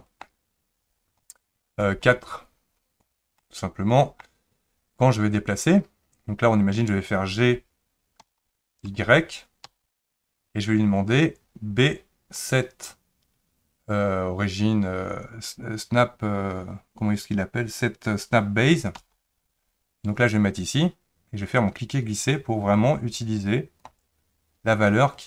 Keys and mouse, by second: 3.4-4.2 middle drag, 8.2 g.